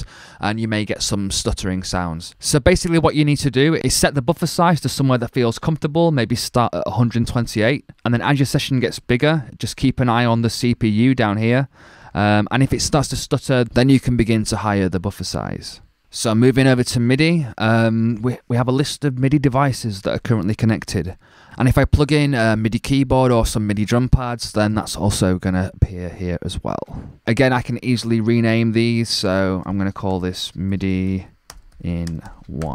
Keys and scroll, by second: 29.7-32.7 typing.